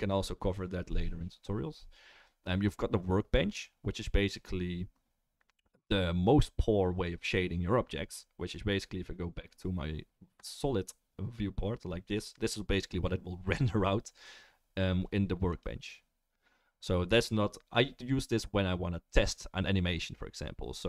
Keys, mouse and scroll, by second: 14.1-20.8 right drag, 15.5-20.8 drag, 15.5-20.8 middle drag.